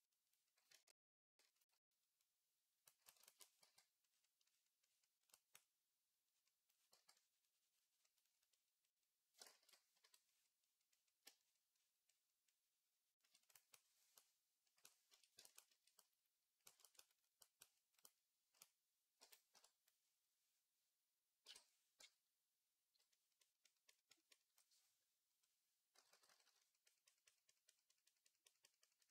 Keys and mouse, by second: 2.1 ctrl+r, 2.7 click, 3.5 v, 5.2-29.1 drag, 6.8 v, 9.3 ctrl+z, 9.5 ctrl+z, 9.9 i, 19.0 j, 19.4 KP_3, 21.3-22.7 typing, 25.8 [, 26.0 [, 26.1 [, 26.3 [.